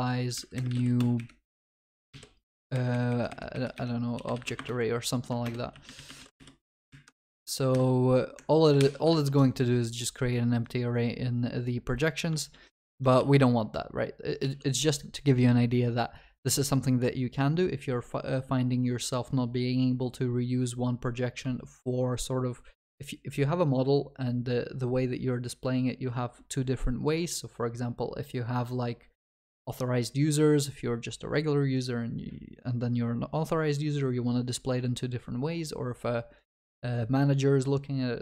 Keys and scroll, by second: 4.6 Return, 5.4 ctrl+BackSpace, 8.8 ctrl+y, 9.1 ctrl+s, 12.5 ctrl+z, 13.4 ctrl+z, 14.5 ctrl+s.